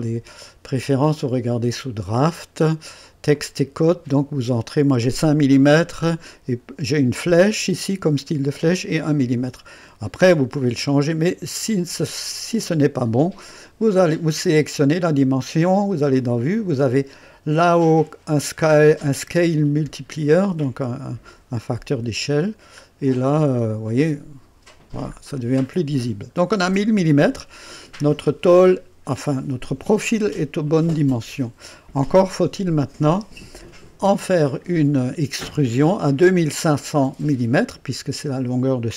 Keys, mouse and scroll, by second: 0.8 click, 2.0 click, 3.3 click, 10.6 click, 15.9 click, 19.0 click, 20.6 scroll up 2, 21.5-21.8 scroll up 2, 22.1-22.4 scroll up 2, 23.1 scroll down 2, 23.9 right click, 24.8 scroll down 2, 26.1 scroll down 1, 26.6-27.6 right drag, 33.8 click.